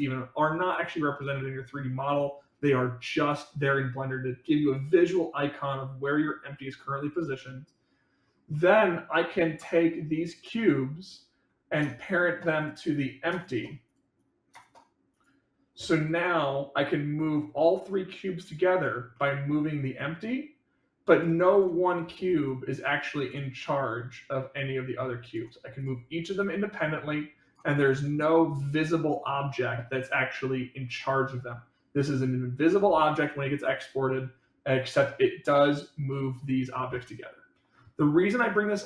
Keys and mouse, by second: 8.4 middle click, 11.1-12.1 drag, 12.6 click, 12.9 click, 13.9 click, 14.1 click, 15.1 click, 17.1-18.8 drag, 19.1-19.5 middle drag, 20.0-21.1 drag, 22.5 click, 23.5 click, 24.5 click, 26.3-27.4 drag, 27.7-28.1 middle drag, 28.4 click, 32.6-33.0 middle drag.